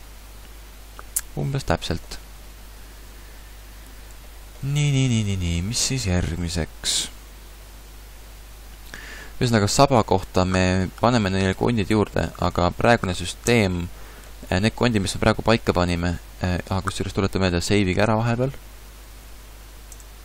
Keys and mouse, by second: 2.5 middle click, 3.0 a, 3.9 a, 13.5 Tab.